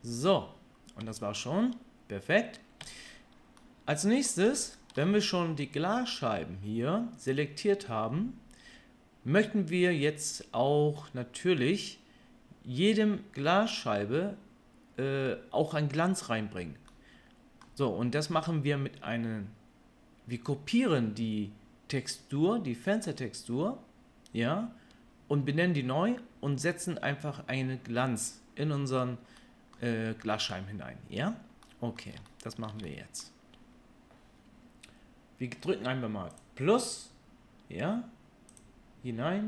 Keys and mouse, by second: 1.0 Tab, 2.8 Tab, 36.3-39.4 drag.